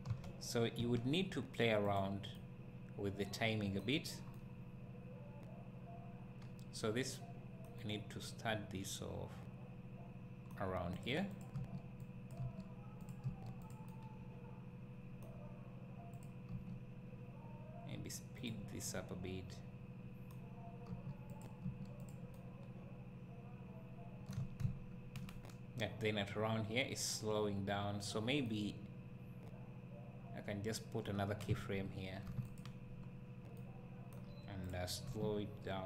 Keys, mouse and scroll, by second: 10.9 click, 11.3 click, 11.6 g, 12.3 click, 13.0 click, 13.3 g, 13.7 click, 13.9-16.1 right drag, 16.1 click, 16.5 g, 18.4 click, 18.9-21.6 right drag, 20.9 g, 22.0 click, 22.4-34.6 right drag, 24.6 `, 32.2 g, 34.6 click, 35.0 g.